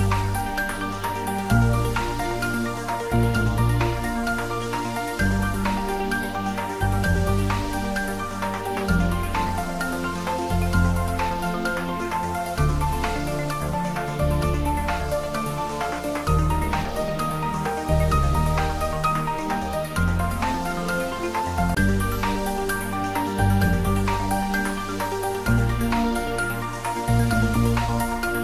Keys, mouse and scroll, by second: 1.5-2.1 typing, 6.9 click, 8.7 typing, 13.6 click, 15.3-16.3 typing.